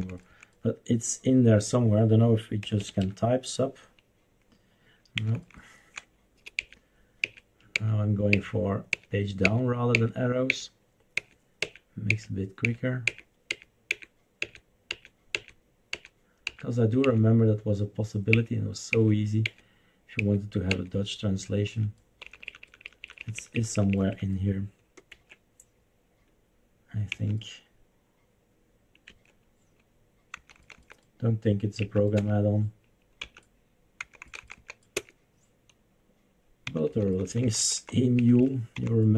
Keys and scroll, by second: 0.0 Down, 0.2 Down, 0.4 Down, 2.4-3.5 typing, 5.3 Down, 5.5 Down, 6.6 Page_Down, 7.2 Page_Down, 7.7 Page_Down, 8.3 Page_Down, 8.9 Page_Down, 9.5 Page_Down, 9.9 Page_Down, 10.5 Page_Down, 11.1 Page_Down, 11.6 Page_Down, 12.1 Page_Down, 12.7 Page_Down, 13.1 Page_Down, 13.5 Page_Down, 13.9 Page_Down, 14.5 Page_Down, 14.9 Page_Down, 15.3 Page_Down, 15.9 Page_Down, 16.5 Page_Down, 17.1 Page_Down, 18.3 Page_Down, 18.9 Page_Down, 19.4 Page_Down, 20.2 Page_Down, 20.8 Page_Down, 21.7 Up, 22.2 Up, 22.4 Up, 22.6 Up, 22.8 Up, 23.0 Up, 23.2 Up, 23.4 Up, 23.6 Up, 23.7 Up, 24.0 Up, 24.2 Up, 25.1 Escape, 27.1 Left, 29.1 Escape, 30.5 Down, 30.6 Down, 30.7 Down, 32.0 Up, 32.1 Return, 33.2 Left, 34.0 Down, 34.2 Down, 34.4 Down, 34.5 Down, 34.9 Return, 36.7 Down, 36.9 Down, 37.1 Down, 37.2 Down, 37.4 Down, 37.6 Down, 37.8 Down, 38.2 Up, 38.3 Up, 38.7 Down.